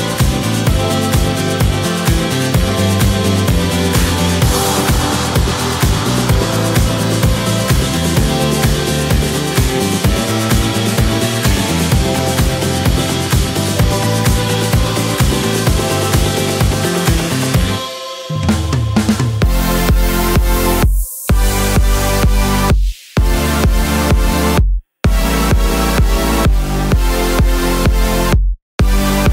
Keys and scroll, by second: 15.8 Right, 16.0 Right, 18.7 Right, 18.8 Right, 23.5 super+z.